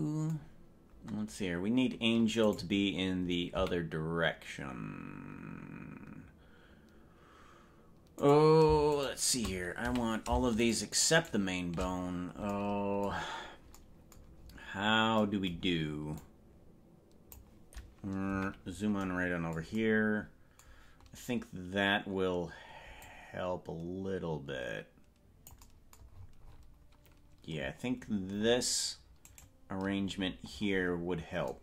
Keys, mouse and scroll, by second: 2.8 right click, 3.8 a, 8.4 right click, 9.2 shift+right click, 10.0 a, 10.8 shift+right click, 11.4 shift+right click, 14.6-15.2 scroll up 8, 16.4-17.5 drag, 18.4 KP_Decimal, 23.1-25.6 drag, 26.2-27.0 scroll down 13, 27.8-28.8 scroll up 12, 29.4 right click, 30.4-31.4 scroll down 9, 31.4 scroll up 1.